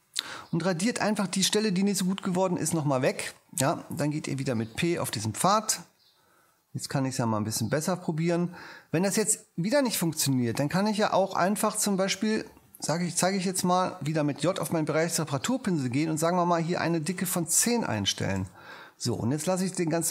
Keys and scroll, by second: 4.6 shift+p, 13.2 ⟲, 14.5 j, 17.3-18.3 typing, 18.3 Home.